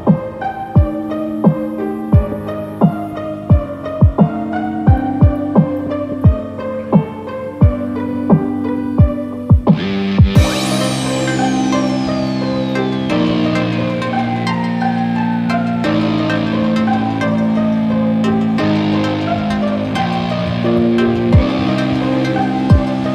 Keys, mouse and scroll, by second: 0.2 ctrl+z, 0.5 ctrl+z, 1.9 alt+shift+click, 7.0 alt+shift+click, 7.3-7.9 alt+shift+click, 7.5 alt+shift+click, 7.6 alt+shift+click, 8.2 alt+shift+click, 8.5 alt+shift+click, 8.7 alt+shift+click, 10.1 shift+click, 10.5 scroll down 5, 11.0 scroll up 3, 11.4 middle click, 13.5 e.